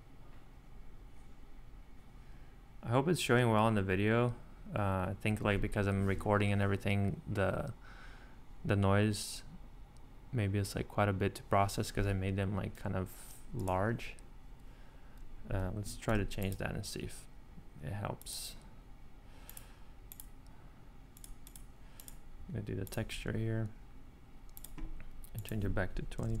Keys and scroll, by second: 16.1 shift+e, 26.0-26.4 typing.